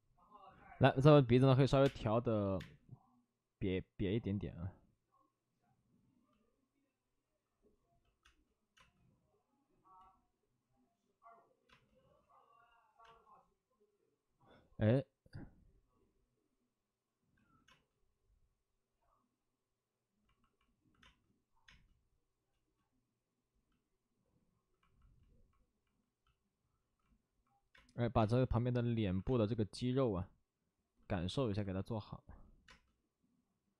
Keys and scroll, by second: 1.7 3, 2.5 space, 7.6 space, 8.2 space, 8.7 space, 9.9 ctrl+z, 11.6 space, 13.0 space, 17.3 ctrl+z, 17.6 space, 21.6 space, 22.5 space, 23.4 space, 23.5 space, 27.6 space, 27.6 space, 28.1 space, 29.0 alt+s, 29.2 space, 31.1 alt+s, 32.6 space.